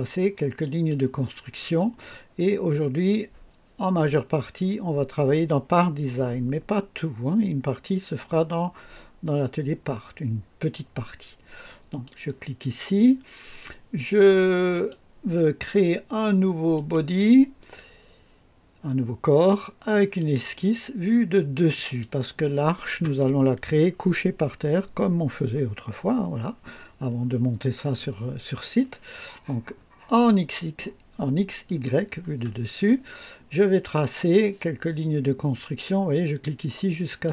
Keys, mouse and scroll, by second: 0.6 click, 11.9 click, 14.7 click, 16.7 click, 20.0 click, 21.7 click, 31.6 click, 36.2 click, 37.1 click.